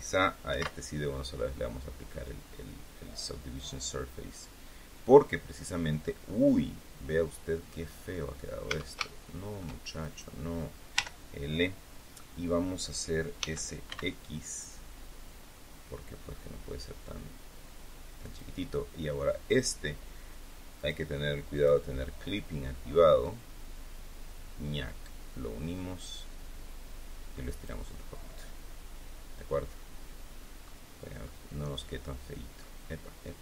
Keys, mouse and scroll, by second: 0.4 ctrl+2, 3.2-6.1 middle drag, 6.7-7.8 middle drag, 8.1 scroll up 2, 8.6 Tab, 9.0 shift+middle click, 9.9 shift+right click, 10.9 l, 13.3 s, 13.8 x, 18.1 click, 20.7 click, 21.5 click, 23.1-27.8 drag, 28.2-30.8 middle drag, 30.9 scroll down 1, 31.2-32.7 middle drag.